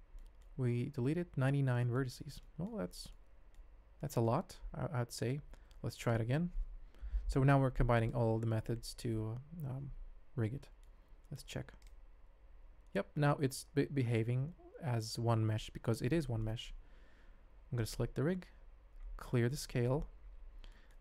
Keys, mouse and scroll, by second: 0.1 middle click, 2.4 middle click, 3.1 middle click, 3.9 middle click, 4.5 Tab, 5.9 shift+click, 7.1 ctrl+p, 10.6 middle drag, 11.4 ctrl+Tab, 11.8 click, 12.0 r, 16.4 middle drag, 16.8 ctrl+Tab, 17.8 click, 18.6 alt+s, 20.7 shift+drag.